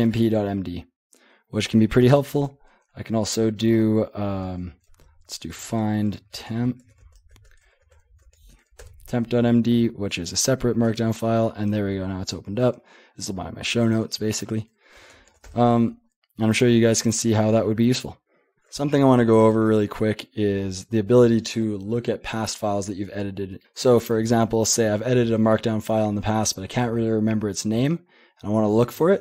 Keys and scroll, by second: 2.4 :, 4.4-8.7 typing, 8.8 Return, 10.8 Return, 11.8 j, 11.9 j, 12.1 j, 13.2 j, 15.0 :, 15.3 q, 15.4 Return.